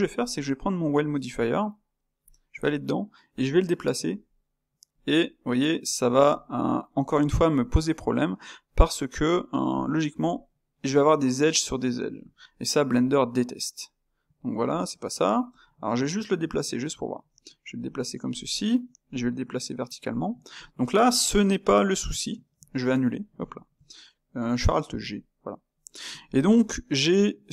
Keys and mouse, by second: 2.2 space, 5.1-9.3 middle drag, 9.7 click, 10.2-12.8 ctrl+middle drag, 12.8 g, 15.4 g, 19.1 g, 20.2-24.9 middle drag, 24.9 alt+g, 25.7-27.5 middle drag.